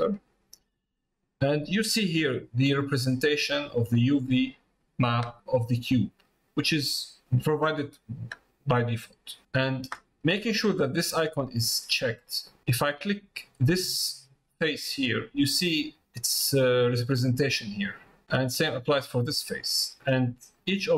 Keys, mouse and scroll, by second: 1.6 middle click, 6.9 middle click, 8.5 middle click, 19.5 click, 20.1 middle click.